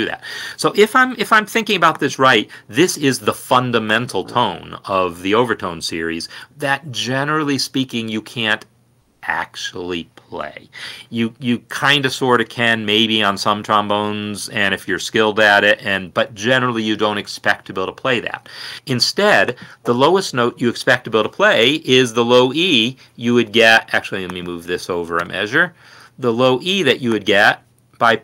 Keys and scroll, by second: 13.8 Right, 17.8 r, 18.7 Escape, 24.7 ctrl+c, 26.7 ctrl+v, 27.2 ctrl+Down, 27.8 Escape.